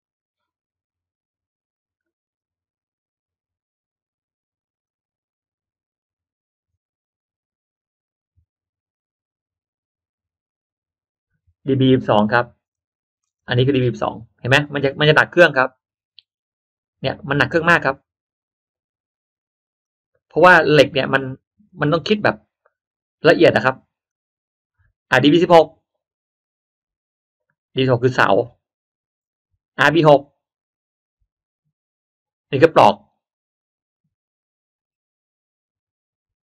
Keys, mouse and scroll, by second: 4.7 click, 12.5-14.2 middle drag, 14.7 middle click, 19.7 click, 21.4 click, 24.0 click, 25.3 click, 27.8-29.0 middle drag, 30.0 click.